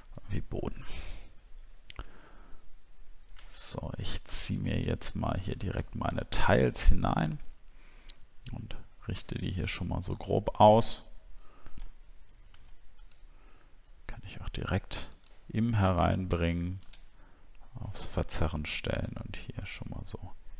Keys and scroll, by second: 12.5 ctrl+t.